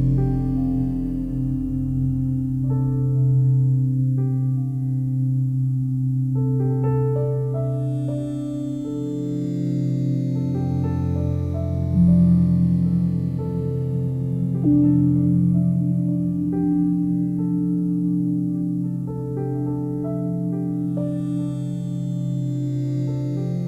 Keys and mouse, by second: 0.1-0.5 ctrl+alt+drag, 1.2 s, 2.5 click, 3.6 g, 4.1 z, 5.8 click, 7.0 g, 7.4 z, 8.6 click, 9.4-10.3 alt+shift+drag, 10.9 ctrl+alt+click, 11.3 alt+shift+click, 11.7 ctrl+alt+click, 12.7-13.2 ctrl+alt+drag, 13.7 ctrl+alt+click, 14.1 alt+shift+click, 14.9 click, 16.6 t, 17.1 Tab, 19.3 click, 20.9 click, 21.9 click, 23.0 click.